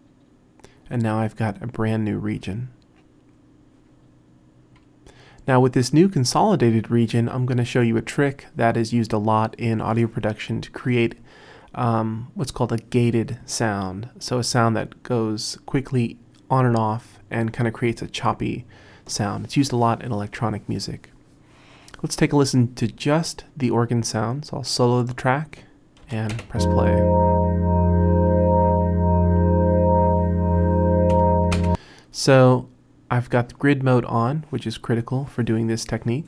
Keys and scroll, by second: 26.1 Return, 26.4 space, 31.6 space.